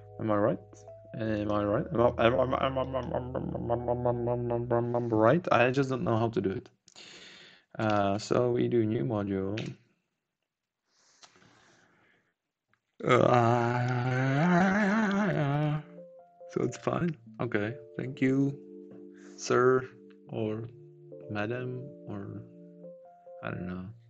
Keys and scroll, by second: 8.1 ctrl+shift+a.